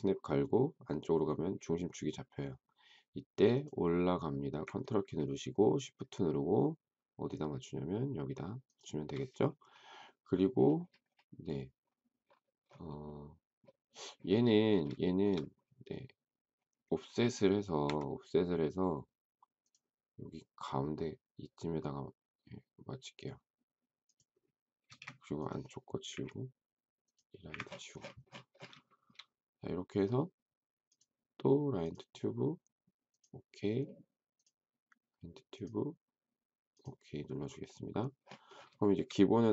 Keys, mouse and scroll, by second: 8.6 shift+click, 15.0 shift+middle click, 17.8 f, 24.8 space, 26.0 Delete, 27.5 Delete, 28.8 shift+middle click, 38.8 shift+middle click.